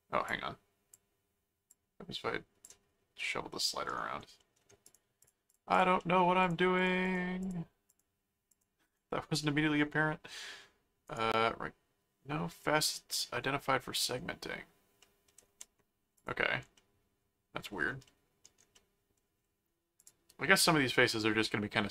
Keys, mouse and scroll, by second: 0.3 click, 1.7 click, 3.2 middle click, 4.4 middle click, 4.8 click, 6.0 middle click, 6.4-8.4 drag, 8.5 click, 9.4 middle click, 11.1 right click, 12.1-12.6 scroll down 2, 12.6-14.1 middle drag, 14.2-14.5 scroll up 2, 15.0 middle click, 16.1 click, 16.7 middle click, 18.0 middle click, 18.7 middle click, 20.0 click, 20.9 middle click.